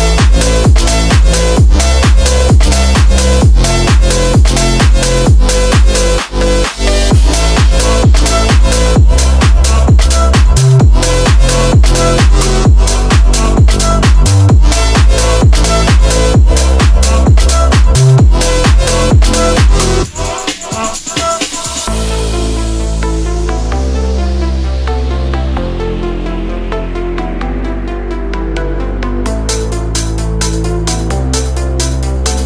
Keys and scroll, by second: 0.2 Escape, 0.6 space, 1.9 F3, 4.6 Delete, 5.1 Delete, 6.3 Delete, 9.8 F3, 10.1 Escape, 17.2 Return, 23.1 F3, 31.2 space, 32.0 ctrl+z.